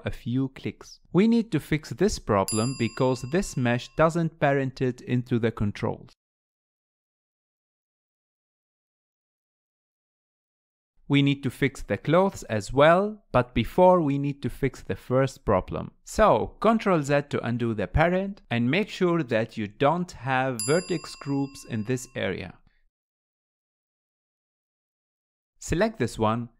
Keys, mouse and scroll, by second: 0.7-1.9 scroll up 2, 1.9-2.2 scroll up 3, 2.2-3.6 shift+middle drag, 3.6 click, 4.9 click, 5.9 r, 6.4 shift+middle click, 6.4 scroll down 2, 6.9 r, 7.2 click, 7.4 g, 7.6 middle click, 7.7 scroll up 4, 7.9 middle click, 8.0 click, 8.4 middle click, 8.6 scroll down 1, 8.7 shift+middle click, 8.8 click, 8.9 r, 9.3 click, 9.4 g, 9.8 click, 9.8 g, 10.3-10.7 scroll down 3, 10.4 r, 10.7 middle click, 16.4-16.9 ctrl+z, 17.2 ctrl+z, 17.7 middle click, 18.1 click, 18.8-19.5 scroll up 2, 19.5 click, 21.2 click, 23.2 click, 23.8 click, 25.3 click, 26.0-26.5 shift+middle drag.